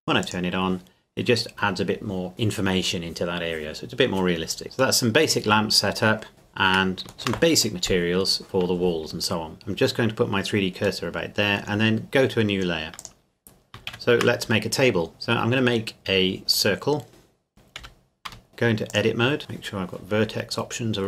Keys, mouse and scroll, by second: 0.2 click, 4.6 click, 5.0 middle click, 5.5-6.3 scroll down 1, 6.3 click, 7.3 shift+middle click, 9.5 click, 11.0 middle click, 13.0 click, 13.9 shift+a, 16.5 click, 17.5 KP_7, 17.8 KP_Decimal, 18.3 Tab, 18.9 click.